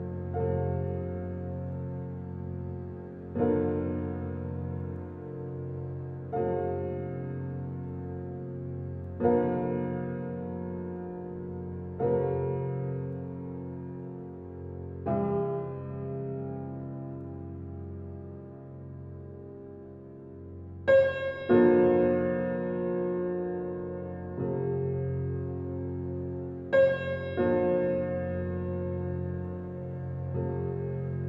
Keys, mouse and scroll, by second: 4.6-6.9 drag, 7.2-9.3 alt+drag, 9.3 alt+right click, 9.7 alt+middle click, 10.4 alt+click, 11.2 alt+right click, 11.5 alt+click, 12.1 alt+middle click, 12.6 alt+right click, 13.6 alt+middle click, 14.2 alt+right click, 14.7 alt+click, 15.3 alt+right click, 16.2 alt+middle click, 17.1 alt+right click, 17.6 middle click, 17.9-19.9 alt+middle drag, 19.9 alt+right click, 20.3-22.9 alt+middle drag, 22.9 click, 23.3 w, 24.9 typing, 26.0-28.5 drag.